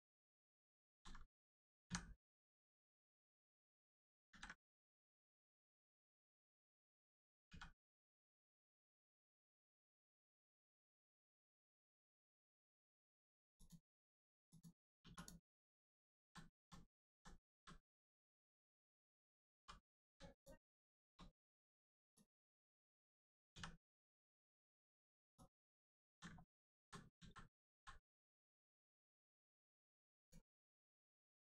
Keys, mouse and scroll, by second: 0.0 shift+middle click, 0.8 alt+middle click, 0.8 alt+z, 3.5 click, 4.2 ctrl+z, 4.7 scroll up 1, 7.4 x, 10.9 middle click, 11.7 shift+middle click, 12.3 middle click, 12.4 middle click, 13.5 click, 15.0 2, 15.1 click, 16.2 ctrl+z, 16.5 ctrl+z, 19.5 2, 20.3 shift+click, 22.1 shift+click, 25.3 click, 26.0 ctrl+z, 26.4 middle click, 26.7 ctrl+z, 28.3 middle click, 28.4 middle click, 30.2 click.